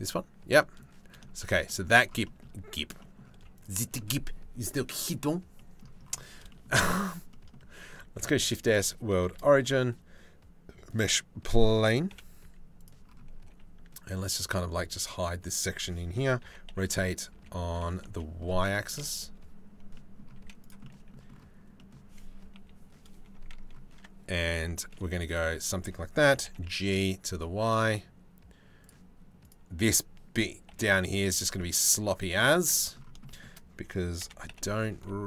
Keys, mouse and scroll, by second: 0.1 middle click, 0.7 middle click, 1.0 shift+middle click, 1.2 middle click, 1.8 shift+middle click, 2.6 middle click, 2.9 z, 3.4 middle click, 5.1 middle click, 6.1 shift+middle click, 6.9 click, 7.8 shift+s, 8.8 shift+a, 11.7 KP_7, 12.0 z, 13.1 g, 16.0 r, 19.5 click, 20.0 z, 20.4 click, 21.4 click, 22.1 KP_3, 23.5 Tab, 24.7 2, 24.9 click, 25.9 g, 29.1-30.3 drag, 30.3 g, 32.3 click, 32.8 right click, 33.8 e.